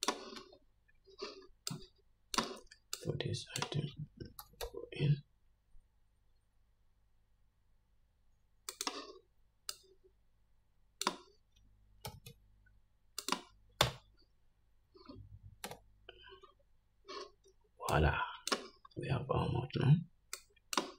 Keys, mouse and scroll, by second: 0.7 Tab, 4.8 g, 10.1-13.6 drag, 12.4 g, 14.1 Tab, 16.0 /, 18.3-20.9 drag, 19.2-19.9 scroll up 1, 19.9-20.7 scroll up 1.